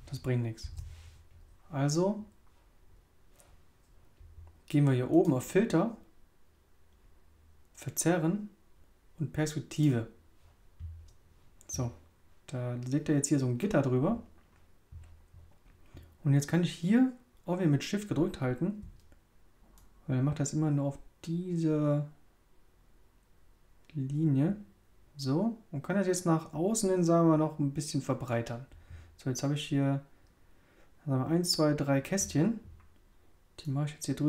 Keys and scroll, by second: 0.6 super+z.